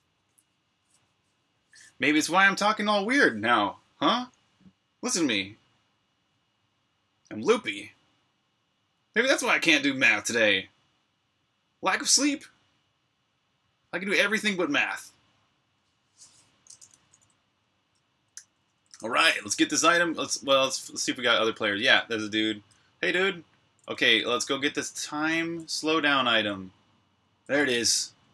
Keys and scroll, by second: 16.8-19.7 typing, 20.7-25.5 typing.